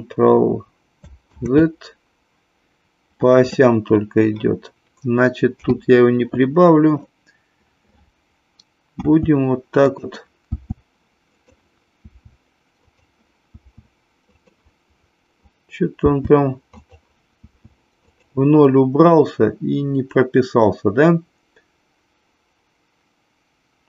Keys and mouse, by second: 1.4 ctrl+z, 5.4 n, 8.9 s, 9.8 click, 10.6 s, 11.9 s, 12.8 click, 13.5 s, 14.3 click, 15.9 s, 16.8 click, 17.3 s, 18.0 click.